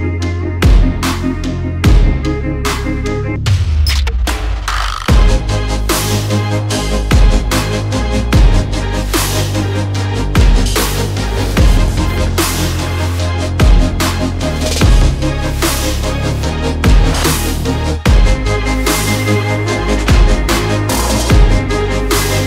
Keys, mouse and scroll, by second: 0.0-3.3 typing, 1.3 click, 5.2 f, 6.2 click, 6.4 click, 8.7 click, 11.4 0, 12.7 click, 14.4 alt+click, 14.9-17.2 typing, 18.8-19.9 typing, 19.1 click, 21.3 space, 21.5 space, 22.1 space.